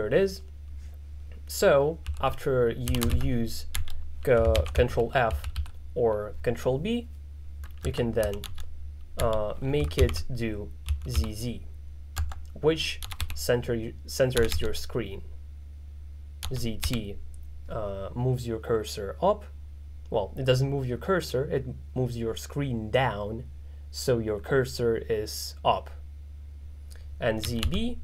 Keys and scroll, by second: 2.1-3.8 typing, 10.7-11.7 typing, 12.8-14.6 typing, 16.5 z, 16.9 t, 27.2-28.0 typing.